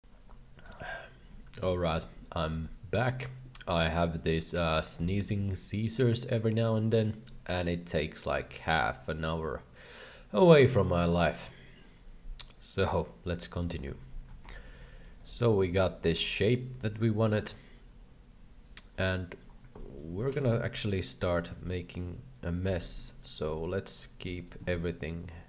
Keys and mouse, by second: 14.5 shift+middle click, 15.4-18.7 shift+drag, 19.0 shift+middle click, 19.7 shift+middle click, 20.2 alt+a, 20.4 b, 21.5 s, 22.8 alt+a, 23.1 shift+middle click, 23.4 b, 24.6 s.